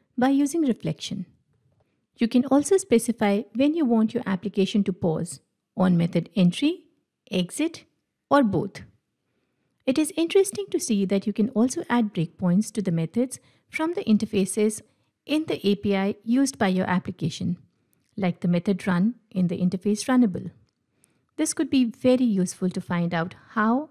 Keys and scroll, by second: 1.8 ctrl+F8, 18.6 ctrl+F8.